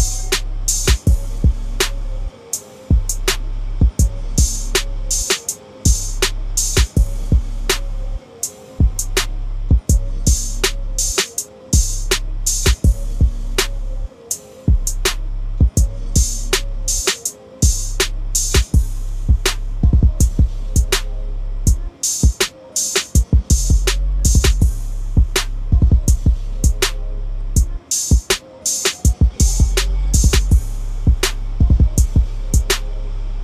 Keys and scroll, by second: 6.8 typing, 12.8 ctrl+a, 13.3 ctrl+c, 16.3 ctrl+v, 23.2 ctrl+d, 24.2 ctrl+=, 30.3 ctrl+=.